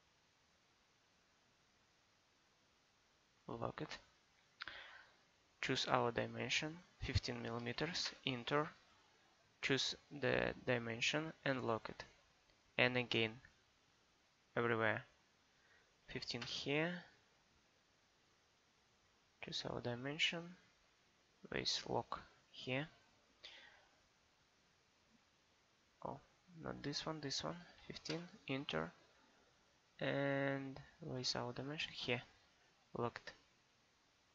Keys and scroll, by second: 7.6 1, 7.8 5, 8.1 Return, 16.0 1, 16.2 5, 16.5 Return, 27.6 1, 27.7 5, 28.1 Return.